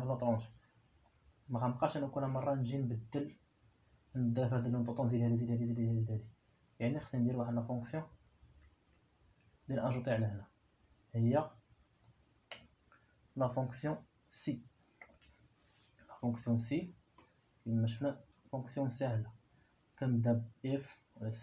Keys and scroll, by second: 17.2 i, 18.8 5.